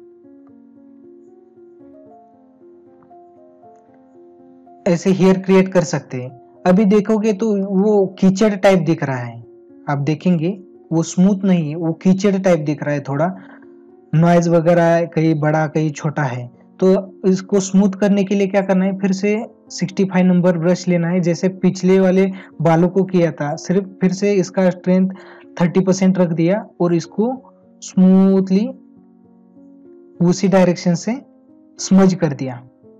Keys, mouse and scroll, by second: 6.7 ctrl+-, 7.6 space, 10.2 space, 12.0 space, 16.8 ctrl+-.